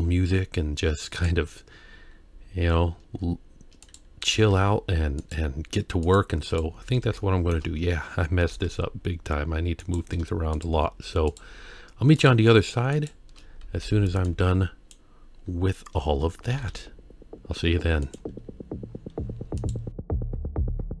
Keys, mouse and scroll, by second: 1.2 click, 3.9 click, 4.3 g, 6.0 click, 6.5 click, 7.2-7.5 shift+middle drag, 7.8-8.5 scroll down 1, 8.5 g, 10.5 shift+click, 11.3 shift+click, 12.2 shift+click, 13.0 shift+click, 13.5-13.8 scroll down 1, 13.8 b, 16.5 g, 18.9-19.6 scroll up 1, 19.6 click, 19.6 scroll up 1, 19.9 Tab, 20.0 alt+a, 20.0-21.0 typing, 20.3 click, 20.4 Tab, 20.4 click, 20.7 click.